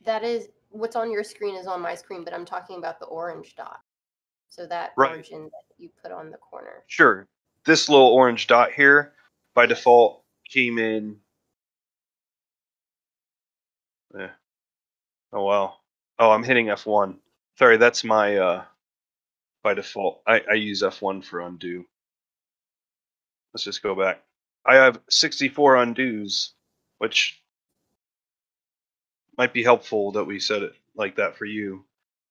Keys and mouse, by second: 11.2 F1, 11.5-14.2 F1, 14.5 F1, 15.3 F1, 15.3-32.3 middle drag, 17.9 ctrl+F1, 18.2 ctrl+z, 18.4 ctrl+z, 19.0 ctrl+z, 19.6 ctrl+z, 20.4 ctrl+z, 20.6 ctrl+z, 21.6 ctrl+z, 22.2 ctrl+z, 22.6 ctrl+z, 22.9 ctrl+z, 23.1 ctrl+z, 23.2 ctrl+z, 23.4 ctrl+z, 23.5 ctrl+z, 23.7 ctrl+z, 25.7 ctrl+z, 25.9 ctrl+z, 26.2 ctrl+z, 27.8 ctrl+z, 28.5 ctrl+z, 28.6 ctrl+z, 29.0 ctrl+z, 29.2 ctrl+z, 31.9 ctrl+z.